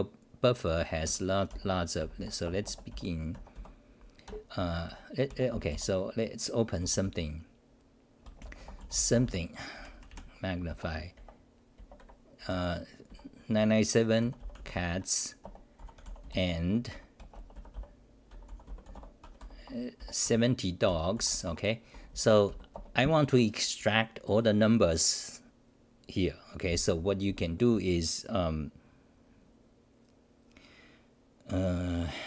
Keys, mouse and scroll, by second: 0.8 Home, 0.8-2.9 typing, 4.2 ctrl+g, 4.9 ,, 6.8 u, 8.2 BackSpace, 12.5 Home, 13.1 l, 14.2 u, 14.9 Home, 15.4 Return, 15.8 u, 16.9 Home, 18.0-22.5 typing, 19.2 Home, 21.5 Home, 22.7 Return, 27.2 c.